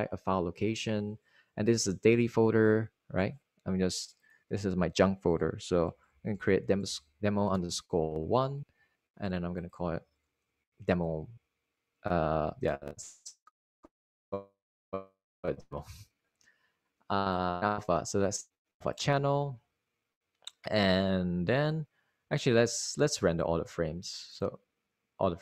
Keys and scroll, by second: 8.2-10.0 typing, 10.2 Return, 12.3 super+a, 12.5-13.8 typing, 15.1 Return, 22.1 Return.